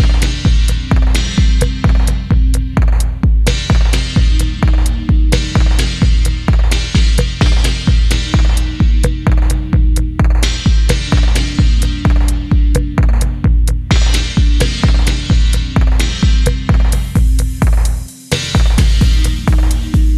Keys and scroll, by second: 0.4 Tab, 1.1 Tab, 1.2 Tab, 1.5 alt+h, 1.9 1, 2.3 s, 3.4 s, 4.5-5.5 typing, 6.6 typing, 7.7 typing, 9.5 ctrl+c, 9.7 z, 9.9 z, 11.0 ctrl+v, 11.3 g, 13.7 ctrl+v, 14.0-19.6 ctrl+z, 14.6 ctrl+c, 14.6 ctrl+c, 15.7 ctrl+v, 16.1 g, 17.2 ctrl+v, 19.6 g.